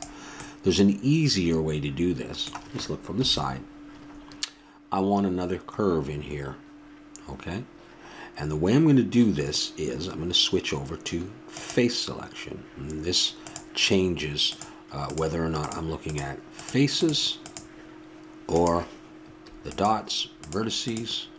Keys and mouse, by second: 3.1 KP_3, 11.5-21.3 drag.